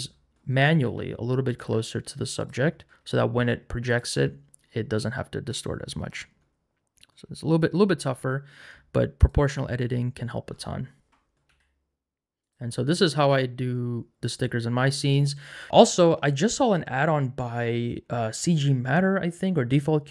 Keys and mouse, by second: 0.8 r, 1.5 click, 1.6 g, 2.4 click, 3.9 click, 7.5 alt+click, 11.5 g, 12.4 click, 15.7 Tab, 15.7 g.